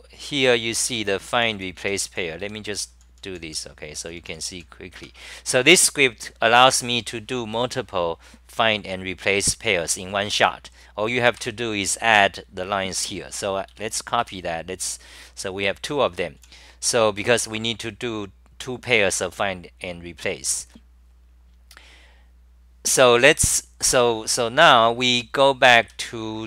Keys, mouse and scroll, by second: 0.0-4.7 typing, 1.8 Home, 4.9 Home, 11.4 6, 13.7-17.2 typing, 25.1 w.